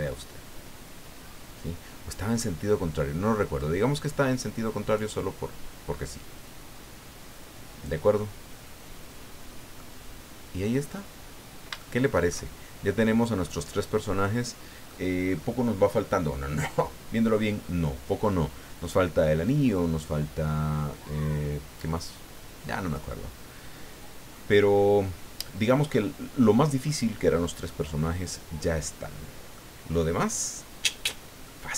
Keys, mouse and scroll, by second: 3.6-8.0 drag, 8.1-9.9 middle drag, 10.3 scroll down 1, 10.9-11.4 scroll up 1, 11.8 shift+click, 12.6-13.3 shift+scroll down 5, 13.4-15.0 drag, 15.2-15.6 scroll up 2, 16.3-16.6 scroll down 2, 17.2 scroll up 2, 17.6 scroll down 2, 18.2 scroll up 2, 19.4-19.7 scroll down 2, 20.9-27.0 drag, 27.7-29.7 drag, 29.9-30.2 scroll up 2, 30.5-31.1 scroll down 4, 31.4-31.7 middle drag.